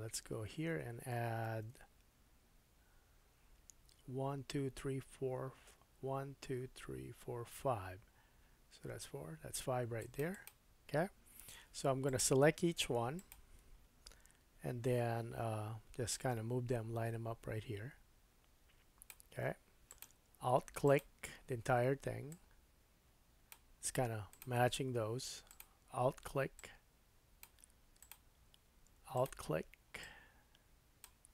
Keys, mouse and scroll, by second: 1.4 ctrl+r, 12.0 click, 13.1 alt+click, 13.8-16.1 middle drag, 13.8-15.1 scroll up 3, 15.1-16.1 scroll up 1, 16.1-20.0 drag, 20.0 middle click, 20.8 alt+click, 21.0-22.3 alt+middle drag, 22.3-24.4 drag, 24.4-25.5 middle drag, 25.5 alt+click, 26.6-28.1 drag, 29.1 alt+click, 30.0-31.3 drag.